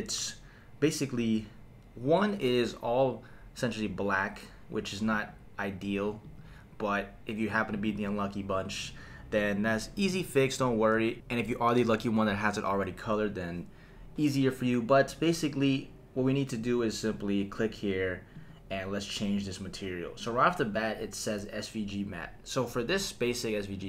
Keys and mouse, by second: 5.1 click, 6.5 click, 7.7 click, 16.5 click, 18.3 click.